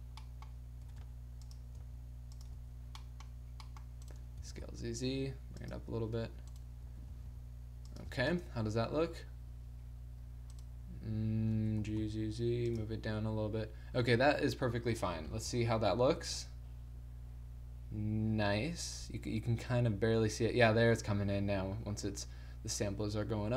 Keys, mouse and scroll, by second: 0.8 r, 1.2 click, 1.8 s, 2.6 a, 3.0 middle click, 4.4 s, 6.0 a, 6.8 g, 8.1 a, 8.3 KP_0, 9.1 click, 10.5-11.6 drag, 11.6 g, 12.8 a, 13.0-14.3 drag, 15.3 shift+z, 22.0-23.5 middle drag.